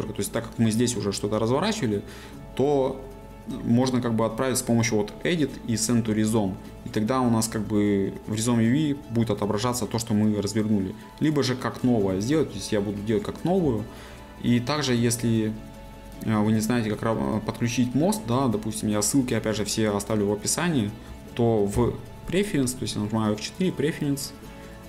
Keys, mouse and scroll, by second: 12.3-24.0 drag, 24.0 F4.